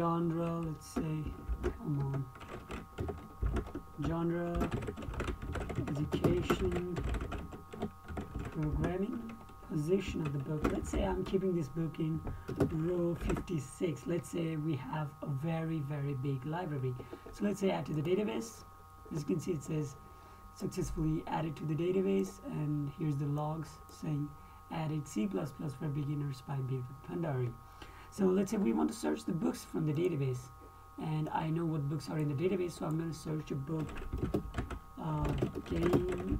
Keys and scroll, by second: 1.9 shift+Tab, 2.4 Right, 3.4 i, 3.8 Tab, 4.7-9.3 typing, 10.8-11.9 typing, 12.9-14.2 typing, 34.6-36.3 typing.